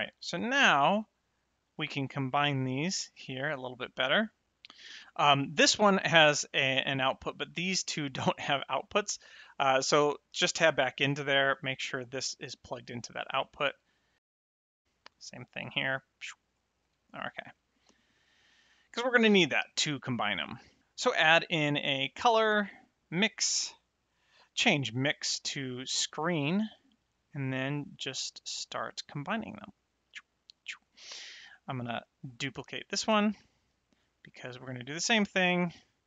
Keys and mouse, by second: 1.8 click, 3.6 click, 5.2 middle click, 9.0 click, 10.5 Tab, 11.9 click, 13.9 Tab, 14.2 click, 14.3 Tab, 15.6 click, 16.8 Tab, 17.5 middle click, 19.6 shift+a, 21.2 a, 23.0 click, 24.2 click, 26.1 click, 28.0 click, 29.9 click, 31.0 click, 34.8 click.